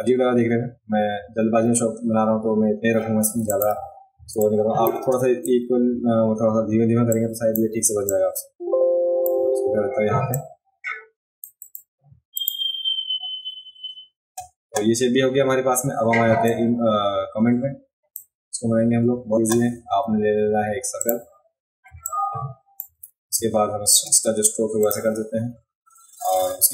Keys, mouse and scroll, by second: 1.6-2.0 alt+scroll down 1, 3.2 v, 3.4 click, 3.4 right click, 4.3 space, 4.4 click, 4.4 right click, 7.2-7.5 drag, 8.0-9.2 drag, 10.3-11.4 drag, 11.6 click, 12.3 click, 16.4-18.1 drag, 21.0 click, 22.1 shift+click, 24.9 click.